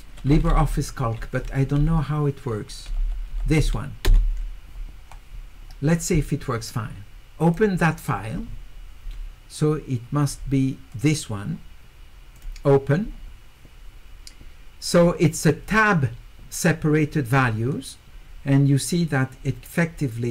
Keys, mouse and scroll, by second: 7.5 click, 10.9 click, 12.4 click.